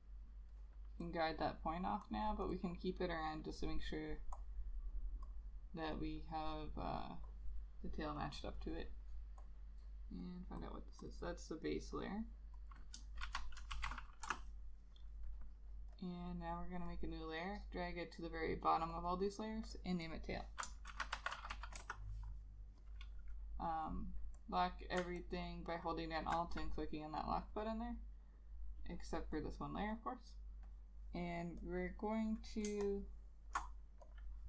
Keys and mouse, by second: 0.2 right click, 2.6 double click, 10.7 double click, 13.4 shift+b, 13.7 a, 13.9 s, 14.0 e, 14.4 Return, 19.2 double click, 21.0 shift+t, 21.3 a, 21.5 i, 21.6 l, 21.9 Return, 25.3 alt+click, 32.8 space.